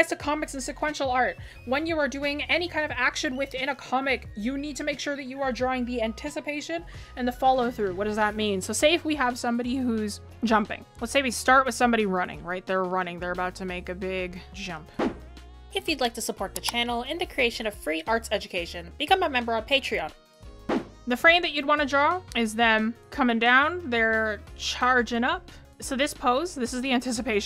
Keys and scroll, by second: 9.6 ctrl+z, 12.6 ctrl+z.